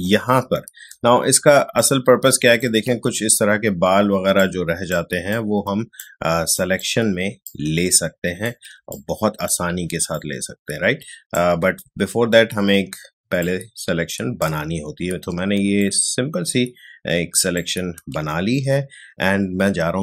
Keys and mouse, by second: 1.3 space, 1.7-3.9 ctrl+drag, 3.9 space, 4.3 click, 4.4 space, 5.3 click, 5.4 space, 6.5 click, 6.7 space, 7.4 click, 7.5 space, 8.9-13.4 ctrl+drag, 13.4-15.5 alt+drag, 15.5 space, 15.8-20.0 ctrl+drag.